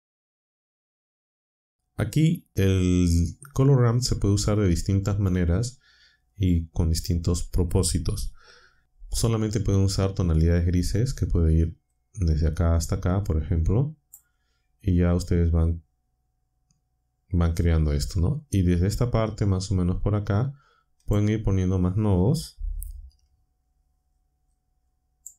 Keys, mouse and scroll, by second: 11.9-14.2 drag, 21.0 click, 25.2 click.